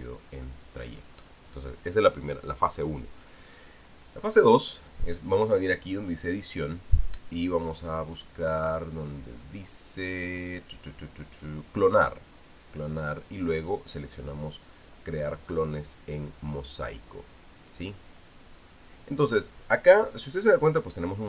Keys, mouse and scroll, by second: 1.4 click, 6.1 click, 19.0 click, 21.1 click.